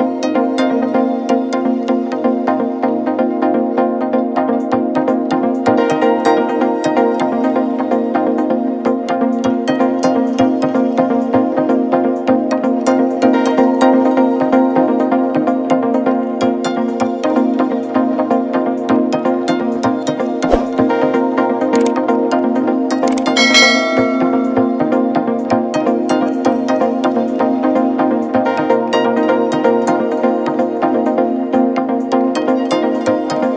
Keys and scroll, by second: 6.7 F4, 12.8 shift+Page_Down, 29.0 F9.